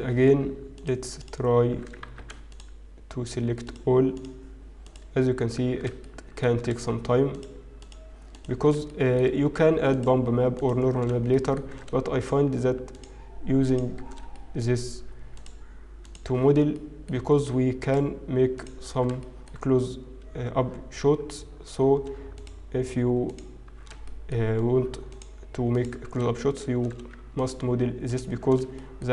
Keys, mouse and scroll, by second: 0.7 alt+shift+click, 1.2 alt+shift+click, 2.3 ctrl+alt+shift+z, 4.2 alt+shift+click, 5.0 alt+shift+click, 6.0 shift+middle click, 7.2 alt+shift+click, 8.2 alt+shift+click, 8.6 alt+shift+click, 8.9 shift+middle click, 9.8 alt+shift+click, 10.5 alt+shift+click, 11.2 shift+middle click, 12.2 alt+shift+click, 12.9 alt+shift+click, 14.0 alt+shift+click, 14.3 shift+middle click, 15.4 alt+shift+click, 17.0 shift+middle click, 17.0 alt+shift+click, 17.7 alt+shift+click, 18.5 alt+shift+click, 19.2 shift+middle click, 19.7-20.7 scroll up 1, 22.3 alt+shift+click, 23.2 alt+shift+click, 25.1 alt+shift+click, 25.1 shift+middle click, 25.7 alt+shift+click, 26.7 shift+middle click, 27.4 alt+shift+click, 28.0 alt+shift+click.